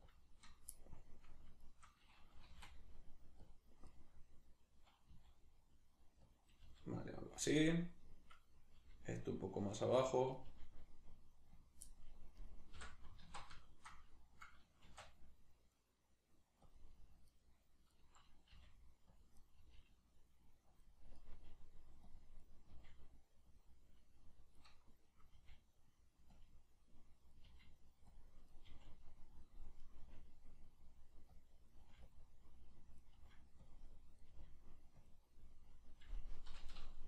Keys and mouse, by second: 0.2 click, 0.5 right click, 0.7 middle click, 1.6 shift+right click, 2.4 g, 3.5 click, 3.9 right click, 5.1 s, 6.4 click, 6.7 g, 7.4 click, 7.4 middle click, 8.4 right click, 8.8 g, 9.6 click, 10.4 right click, 10.5 g, 11.7 click, 11.9 middle click, 12.4 right click, 12.8 l, 13.6-16.8 shift+middle drag, 14.9 shift+d, 16.8 click, 17.3-18.6 right drag, 18.6 g, 19.2 click, 19.4 right click, 19.6 g, 20.8 click, 21.2 right click, 21.4 g, 22.2 click, 22.4 right click, 22.7 g, 23.6 click, 24.6 right click, 25.4 g, 26.4 click, 27.3 right click, 27.5 g, 28.2 click, 28.5 right click, 28.7 g, 29.4 click, 29.8 right click, 30.0 g, 31.4 click, 31.7 right click, 31.8 g, 32.2 click, 33.0 right click, 33.2 g, 33.7 click, 34.2 right click, 34.3 g, 35.1 click, 36.0 right click, 36.5 l.